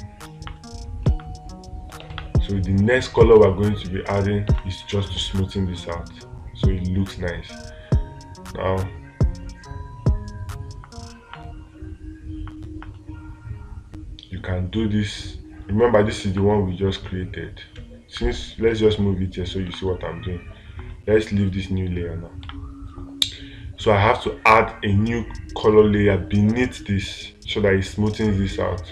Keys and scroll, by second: 1.5 space, 2.5 space, 5.0 space, 22.9 space.